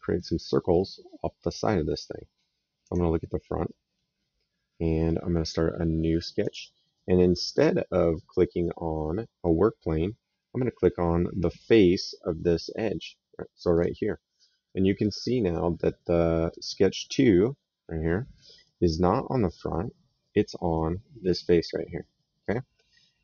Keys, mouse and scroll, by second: 2.7 click, 3.5 middle click, 6.2 click, 6.8 right click, 13.6 click, 14.5 right click, 18.5 right click, 20.1 right click, 22.3 click.